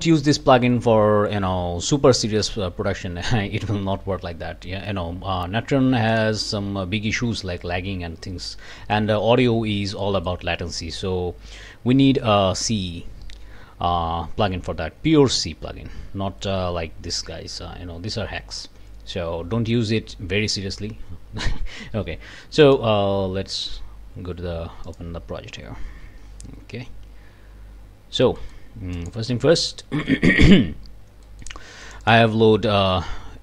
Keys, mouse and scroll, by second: 0.0 Return, 6.1 click, 6.5-6.9 scroll up 2, 8.7 click, 10.0 click, 22.6 click, 24.8 click, 28.4-28.7 scroll up 2, 28.7 click, 28.9-29.2 scroll up 2, 29.3 Delete, 29.7 click, 31.3 click, 31.8 click, 32.9-33.4 scroll down 2.